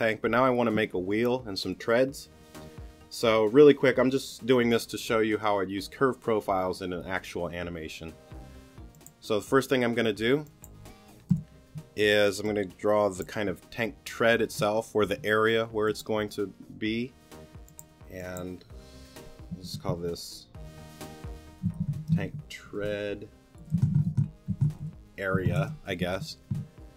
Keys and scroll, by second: 11.3 BackSpace, 21.4 t.